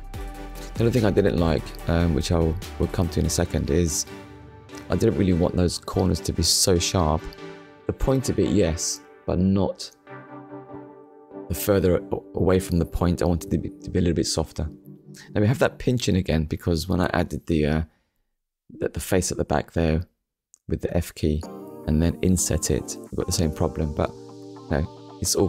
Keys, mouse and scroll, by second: 0.8 Tab, 2.1 middle click, 3.5 click, 5.2 alt+click, 6.0 middle click, 14.6 shift+click, 15.4 middle click, 17.0-17.3 scroll up 1, 18.0 middle click, 20.1 middle click, 22.7 ctrl+r, 23.5 click.